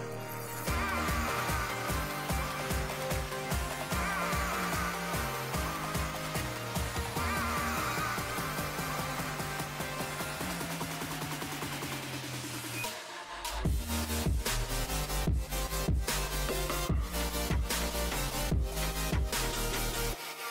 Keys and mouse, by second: 2.4 Tab, 9.2 g, 11.9 g, 13.4 g.